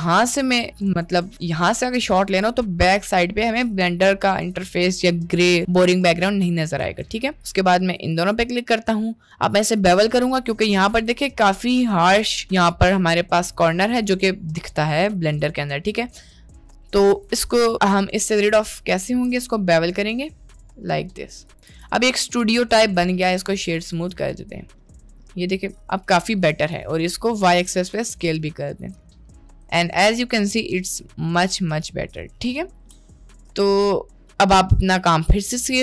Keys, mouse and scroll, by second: 0.1-0.5 shift+middle drag, 0.9 middle click, 2.1-2.5 middle drag, 3.7 middle click, 6.8 Tab, 7.6 click, 8.7 middle click, 9.5 middle click, 10.2 middle click, 10.7 middle click, 11.0 Tab, 14.7 middle click, 15.7 middle click, 16.3 middle click, 17.1 middle click, 17.2 Tab, 19.2 ctrl+b, 21.7 Tab, 22.3-23.3 drag, 24.4 middle click, 25.4-26.0 middle drag, 26.4 middle click, 26.8 click, 27.9 s, 28.9 click, 29.3-31.1 middle drag, 31.8 middle click, 33.0-33.4 middle drag, 33.8 ctrl+s.